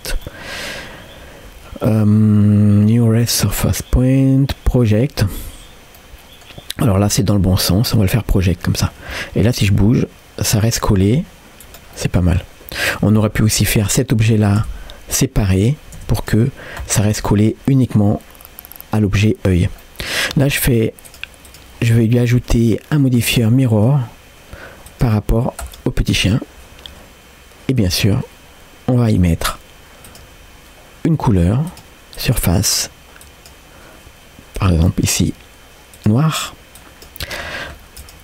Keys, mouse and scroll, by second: 0.3 middle click, 3.2-6.0 drag, 6.0 middle click, 7.8 middle click, 8.9 scroll down 1, 9.2 middle click, 9.8 g, 12.0-13.0 middle drag, 13.4-13.9 scroll down 2, 13.7 click, 14.7 Tab, 16.2 Tab, 16.2 click, 16.6 scroll up 1, 16.8 middle click, 17.3 g, 19.8 middle click, 21.1-23.9 drag, 24.9 click, 26.2-27.3 scroll down 1, 27.8 click, 29.2 click, 30.1-38.0 drag.